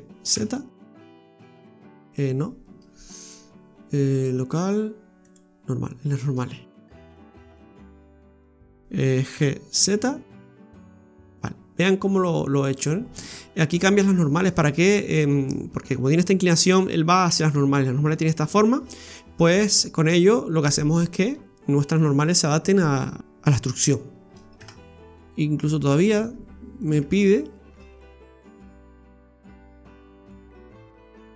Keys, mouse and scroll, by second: 3.2 click, 6.8 ctrl+z, 7.2 ctrl+z, 7.5 ctrl+z, 9.3 g, 15.3-15.7 scroll down 4, 15.7 middle click, 23.2 scroll up 6, 24.1-24.5 scroll down 1, 24.5 Tab, 25.1 scroll down 2, 25.1 middle click, 26.3 scroll up 1, 26.8 right click, 27.0 Tab, 29.1 click, 29.8 right click, 30.4 shift+right click, 30.7 right click, 31.1 shift+right click.